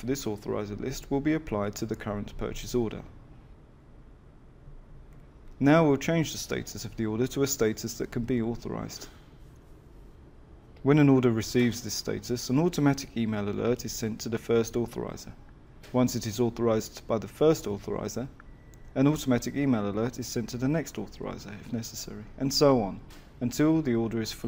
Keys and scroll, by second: 6.4 F6.